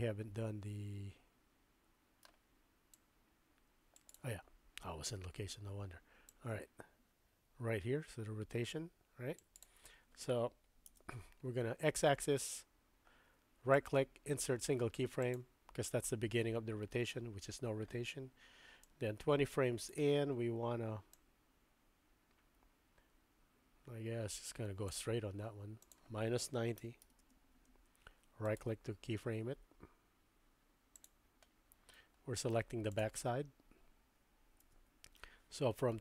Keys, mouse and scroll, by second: 3.0-4.1 drag, 6.4-9.6 drag, 10.9 KP_3, 13.9-15.4 right drag, 18.8-20.0 drag, 21.2-24.9 drag, 25.9-28.5 drag, 28.5-31.1 middle drag, 31.9-32.5 middle drag, 32.9 click, 34.6 KP_3.